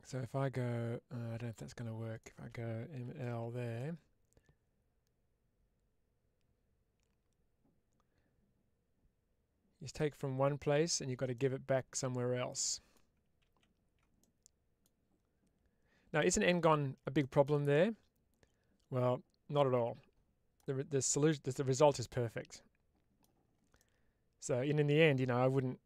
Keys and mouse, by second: 1.4 click, 3.6-9.8 middle drag, 11.2-12.8 middle drag, 14.1 middle click, 16.1 middle click, 17.1 middle click, 18.9 Tab, 19.4-20.4 middle drag, 21.1-23.1 middle drag, 23.6-25.8 middle drag.